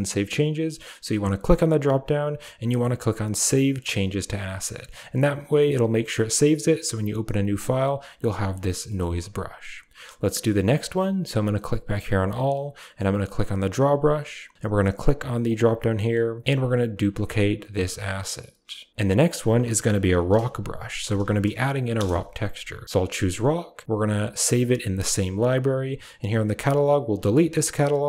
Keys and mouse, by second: 1.2-3.9 drag, 5.5 middle click, 8.6 middle click, 8.9 shift+middle click, 13.5 click, 15.5 click, 16.9-28.0 drag.